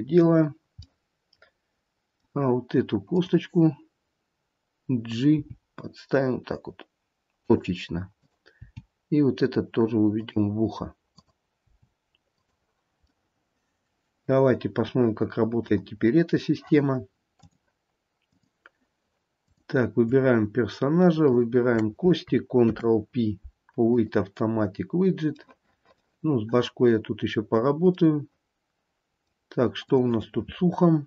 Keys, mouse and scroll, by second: 0.7 scroll down 1, 1.0 middle click, 3.3 click, 5.5 g, 8.4 click, 10.4 g, 11.3 click, 12.6 g, 13.4 middle click, 16.1 scroll down 1, 17.6 click, 19.7 click, 21.5 shift+click, 23.0 ctrl+p, 25.7 middle click, 25.8 middle click, 27.6-28.2 scroll up 2, 28.2 middle click, 28.8 middle click, 29.0 middle click, 29.8 middle click, 30.0 click.